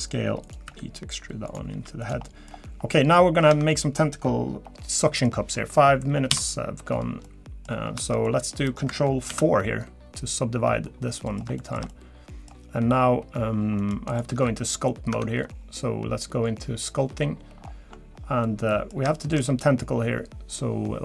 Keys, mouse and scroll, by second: 0.7 e, 1.7 s, 2.2 middle click, 2.5-3.1 scroll down 3, 3.1-3.5 scroll up 4, 3.5 Tab, 4.5 scroll down 1, 5.0 middle click, 6.3 KP_7, 7.2 middle click, 7.7 scroll down 2, 8.2 middle click, 9.7 ctrl+4, 10.2 scroll down 1, 11.3 middle click, 11.6 shift+middle click, 11.9 middle click, 13.8 middle click, 14.1 click, 14.7 Tab, 15.5 Tab.